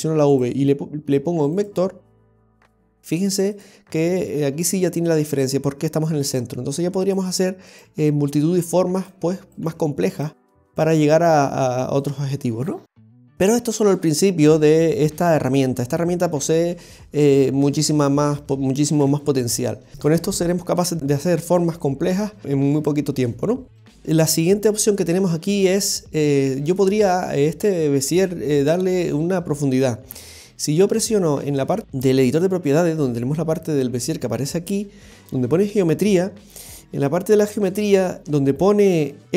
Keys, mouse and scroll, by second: 1.6 right click, 2.4 g, 4.2 right click, 4.4 g, 7.7 right click, 7.8 g, 9.5 right click, 9.6 g, 10.8 right click, 11.2 g, 13.2-14.7 scroll down 5, 15.1-15.8 scroll down 1, 15.8 middle click, 15.8 scroll up 1, 19.0 KP_7, 24.0 shift+middle click, 24.0-24.4 scroll down 4, 24.7 scroll down 1, 25.3 scroll down 2, 25.7 middle click.